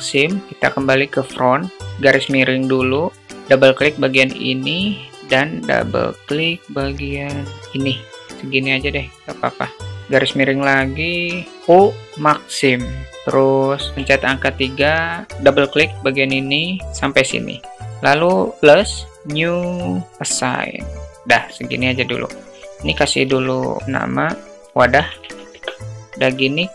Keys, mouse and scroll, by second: 1.8 /, 2.5 alt+middle click, 3.7-4.7 alt+middle drag, 7.8 shift+click, 9.8 /, 11.5 u, 13.9 3, 14.5 click, 14.7 click, 16.0 shift+click, 16.4 shift+click, 16.6 shift+click, 18.6 click, 19.6 click, 22.1-25.9 drag.